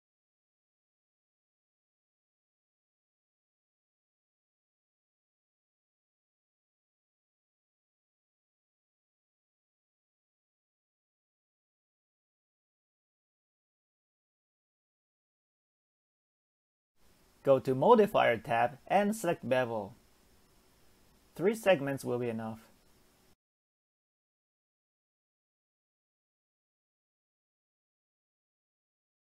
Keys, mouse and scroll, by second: 1.0 Tab, 1.5 scroll down 1, 1.8-3.8 middle drag, 3.8-4.3 scroll up 1, 4.3-4.6 middle drag, 4.6 Tab, 5.0-5.4 scroll up 1, 5.4 Tab, 5.9 click, 6.6 middle click, 7.5 shift+click, 8.1 middle click, 9.0 s, 13.9 Tab, 14.3-14.7 scroll down 2, 15.0-16.3 middle drag, 16.3 Tab, 16.8 Tab, 18.0 click, 19.0-19.8 drag, 19.8-21.0 middle drag, 21.0-22.8 drag, 22.8 middle click, 23.2-23.9 scroll up 2, 23.9-28.2 drag, 28.6-29.3 scroll down 1.